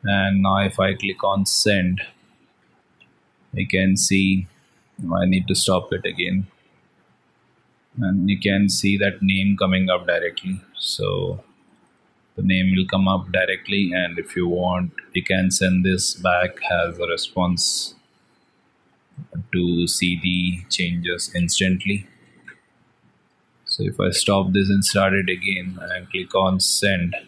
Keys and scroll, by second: 5.5 ctrl+c, 7.1 alt+Tab, 17.5 ctrl+c, 21.2 ctrl+v, 22.1 ctrl+s, 23.5 ctrl+c, 24.7 alt+Tab.